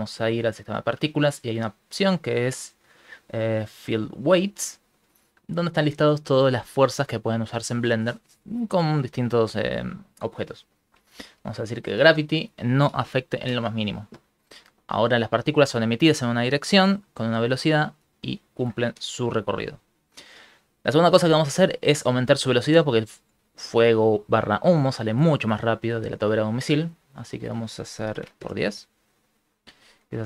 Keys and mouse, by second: 4.1 click, 5.3 middle click, 11.4 click, 13.5 shift+space, 19.3 click, 25.8 click, 27.2 click.